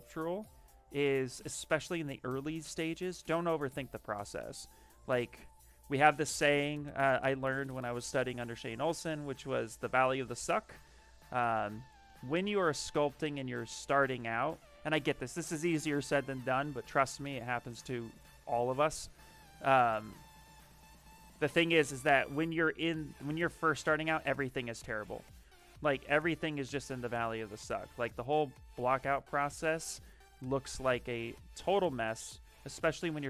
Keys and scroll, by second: 13.4 s, 14.2 s.